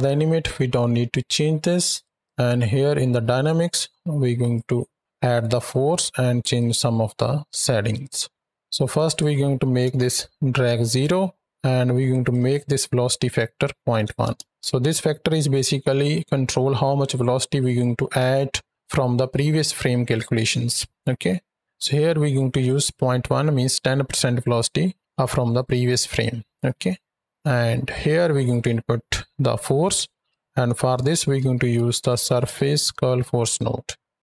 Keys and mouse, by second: 1.7-2.8 drag, 2.8 middle click, 4.4 right drag, 6.4 right click, 7.8 click, 8.9-10.7 drag, 12.1-14.3 drag, 26.5-27.4 middle drag, 27.9-30.1 drag.